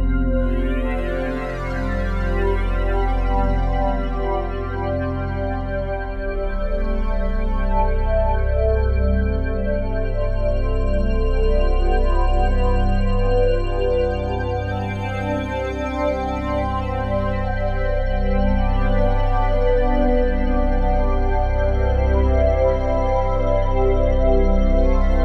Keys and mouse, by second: 0.0-2.4 typing, 3.8-6.0 typing, 6.3 Return, 8.7-9.9 drag, 10.1 typing, 10.7-11.4 drag, 12.2-14.5 drag, 14.8-16.7 typing, 17.4-18.5 drag, 18.1-18.9 typing, 19.3-20.6 drag, 20.6 Delete, 21.5-22.7 drag, 23.5 Escape, 24.1-25.2 ctrl+alt+drag.